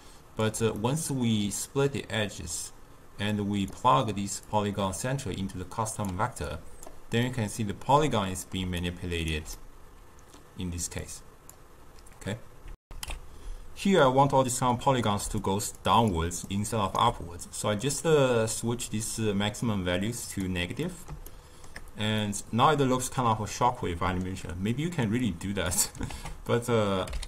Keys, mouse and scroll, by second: 7.3-8.5 middle drag, 8.5 d, 8.8 right click, 9.5-12.7 middle drag, 12.7 alt+shift+q, 15.1 d, 15.3 click, 15.7-16.3 d, 16.4 right click, 16.9 d, 17.9-20.8 drag, 20.8-25.1 middle drag, 25.1-26.0 drag, 26.0 ctrl+a.